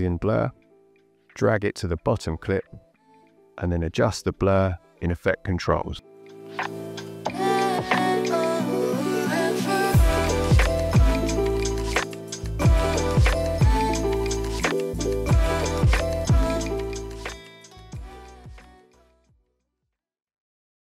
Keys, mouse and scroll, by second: 1.5 click, 7.4 click, 8.5 click.